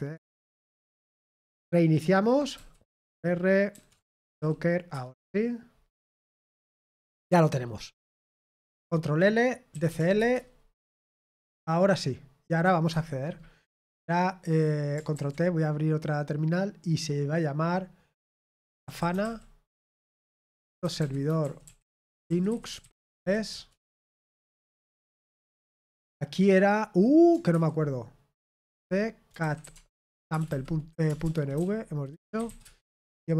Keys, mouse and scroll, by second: 0.1 ctrl+p, 0.5 ctrl+p, 2.5 ctrl+c, 3.7 ctrl+r, 3.8-4.8 typing, 4.9 Return, 21.5-23.6 typing, 29.3-32.0 typing.